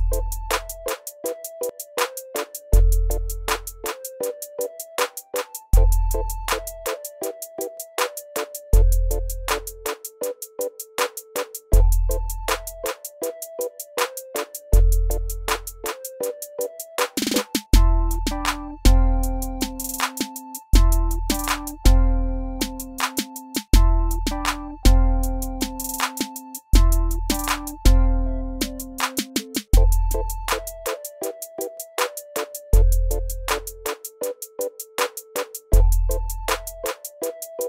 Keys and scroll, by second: 1.5 alt+s, 4.5-6.8 typing, 9.9 e, 11.7 alt+w, 14.1 r, 17.1-17.6 typing, 19.7 e, 23.2-23.9 typing, 25.2 r, 29.8 Delete, 30.6 alt+w, 32.5 alt+w, 37.3 r.